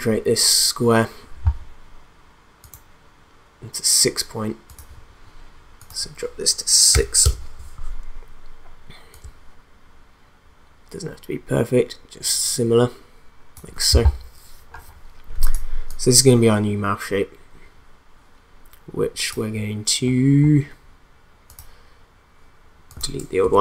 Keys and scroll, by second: 6.9 6, 7.2 Return, 23.4 BackSpace.